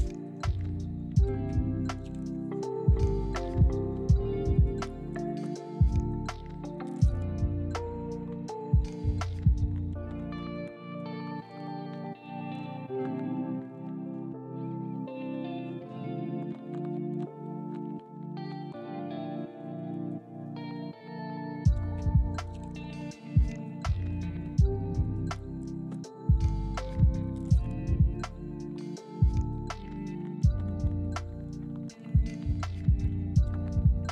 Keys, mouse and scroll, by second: 0.0 g, 0.0 z, 1.1 middle click, 3.0 i, 4.0 g, 4.1 z, 4.8 middle click, 6.5-8.2 typing, 10.4 ctrl+click, 10.7 middle click, 12.8 double click, 16.5 middle click, 24.4 middle click, 27.2 shift+click, 28.2 f, 28.8 middle click, 29.8 s, 30.2 x, 30.6 0, 31.6 shift+click, 32.1 s, 32.3 x, 32.6 0, 33.0 middle click.